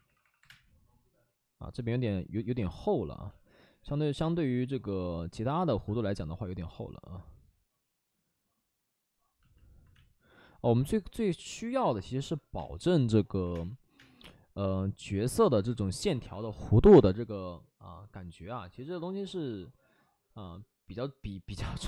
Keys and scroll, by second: 0.0-0.4 typing, 4.2 space, 9.9 space, 12.5 space, 13.3 3, 13.4 space, 13.9 space, 16.8 space.